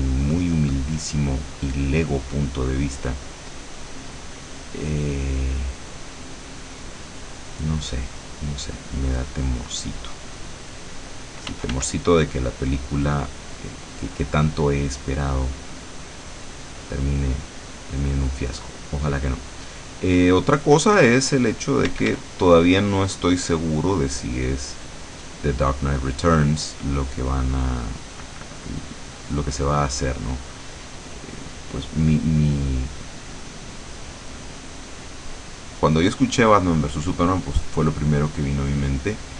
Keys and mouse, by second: 0.5 click, 5.3-7.0 drag, 7.7-10.5 drag, 10.7 click, 11.6 f, 12.3-16.9 drag, 17.9 click, 19.1 click, 20.4-21.4 drag, 21.7 click, 21.9 d, 22.4-24.7 drag, 25.7-29.8 drag, 30.6 click, 32.8-34.8 drag, 35.2-36.4 drag, 37.8-39.3 drag.